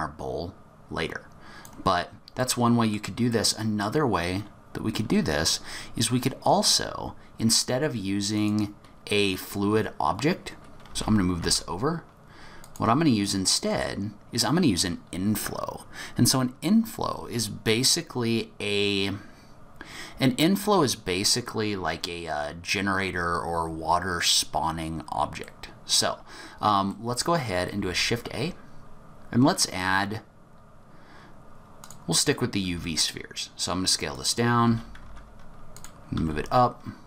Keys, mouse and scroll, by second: 2.1-2.9 scroll down 5, 2.4 middle click, 3.3 middle click, 8.3 click, 10.8 g, 13.2 middle click, 25.4 middle click, 26.4-26.8 scroll up 1, 26.9 middle click, 27.8 shift+a, 32.6 s, 34.6 g, 36.1 s.